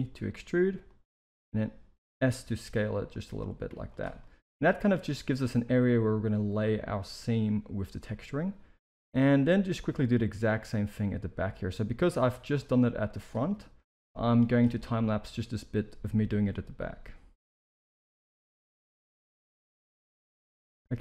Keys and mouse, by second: 1.2 z, 2.4 s, 3.6 z, 4.1 middle click, 5.1 shift+middle click, 8.0 middle click, 9.1 alt+a, 9.4 middle click, 9.8 c, 12.8 z, 13.5-14.0 middle drag, 14.2 z, 14.8 middle click, 17.1 i, 18.0 middle click, 18.2 e, 18.7 s, 19.1 middle click, 19.7 g, 20.2-21.0 middle drag.